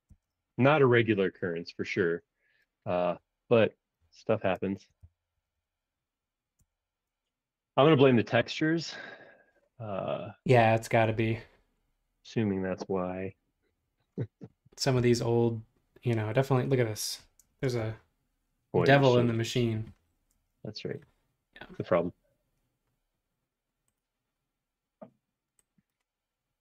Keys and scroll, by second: 0.1 super+q, 4.5 super+space, 4.7-6.0 typing, 8.1 Return, 17.5 space, 20.3 space.